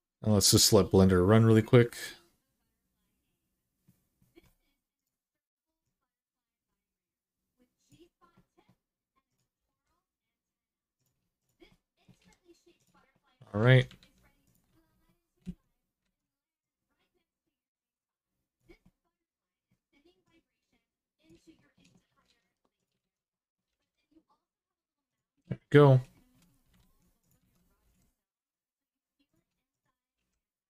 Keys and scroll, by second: 9.4 g, 11.9 g, 13.8 alt+z, 14.5 alt+z, 15.2 alt+z, 15.8 alt+z, 22.0 alt+z, 22.8 alt+z, 23.5 g, 26.6 alt+z, 27.2 alt+z, 27.6 g, 29.9 g.